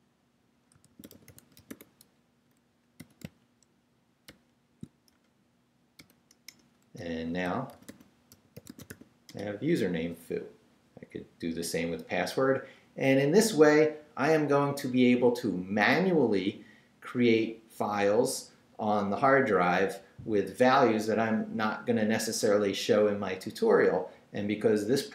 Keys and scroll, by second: 0.5-3.0 typing, 4.3 shift+], 5.1 shift+BackSpace, 5.9 BackSpace, 6.0 ], 6.5 Return, 7.4-9.4 typing.